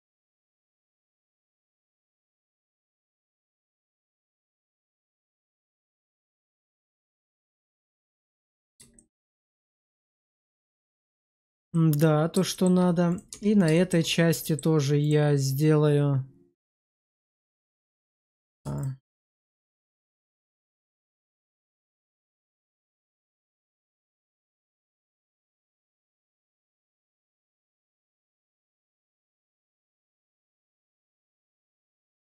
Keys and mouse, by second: 5.2 shift+click, 5.9 middle click, 6.5 middle click, 7.2 shift+middle click, 7.6 Tab, 8.4 middle drag, 8.8 shift+middle drag, 10.0-10.6 middle drag, 11.1 shift+middle drag, 11.6-12.2 middle drag, 12.4 shift+middle drag, 13.0 click, 13.2 Tab, 13.6 shift+middle click, 14.3 middle click, 14.9 click, 17.6 middle click, 18.6 shift+click, 21.6 ctrl+click, 22.1 ctrl+click, 22.5 shift+middle click, 23.8 shift+middle click, 24.7 ctrl+click, 25.4 ctrl+click, 26.2 middle click, 27.2 ctrl+click, 27.7 shift+middle click, 28.5 ctrl+click, 29.7 shift+middle click, 30.1 shift+middle click, 31.7 middle click.